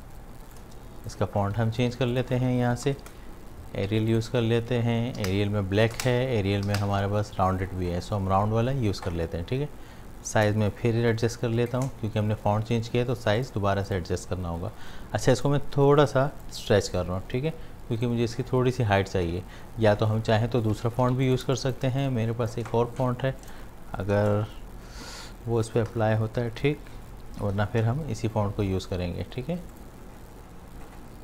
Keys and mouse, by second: 0.9 shift+click, 1.4 v, 2.1 click, 2.4-3.5 typing, 4.1 click, 5.2 Down, 10.3-13.4 drag, 16.7-20.1 drag, 20.8 ctrl+z, 21.2 click, 21.4 space, 21.6 click, 22.0-23.4 alt+drag, 25.4-28.2 typing, 29.7 click.